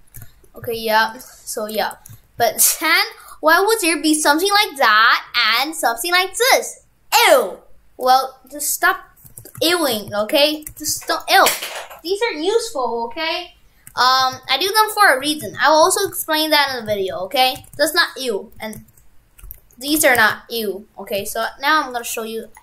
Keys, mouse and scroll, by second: 1.8 shift+f, 9.3 shift+f, 10.8 shift+f, 14.0 shift+f, 15.3-18.8 typing, 20.0 shift+f, 22.5 right click.